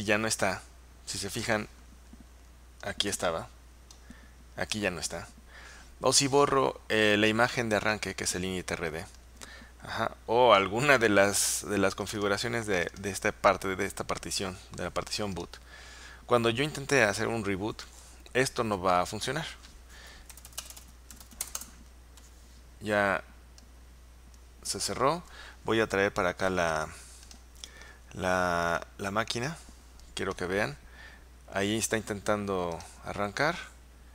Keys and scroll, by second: 20.1-22.0 typing, 23.8 typing.